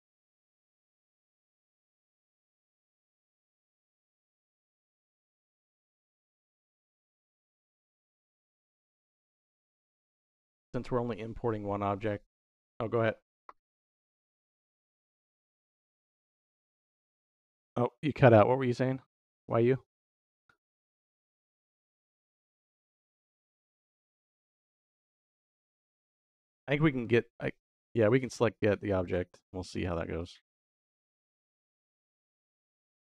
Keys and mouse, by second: 1.7 middle click, 2.2 middle click, 3.0 middle click, 4.9 click, 5.3-6.3 middle drag, 27.8 middle click, 30.4 middle click, 31.1 middle click.